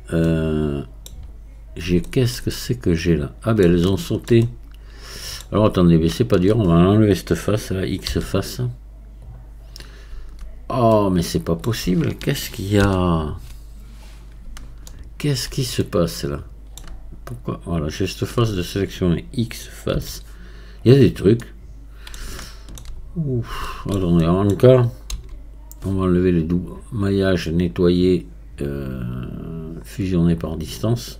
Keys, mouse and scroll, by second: 0.3-1.6 middle drag, 1.6 scroll up 3, 2.1-6.1 shift+middle drag, 6.1-8.1 shift+drag, 8.1 x, 9.9-11.0 scroll down 1, 11.0-12.8 middle drag, 12.8 ctrl+z, 14.3 scroll up 2, 14.9-17.8 shift+middle drag, 17.8-20.0 shift+drag, 20.0 x, 21.4-23.2 middle drag, 23.2-23.7 scroll down 1, 23.7-25.2 shift+middle drag, 25.2 a, 27.0-31.1 drag.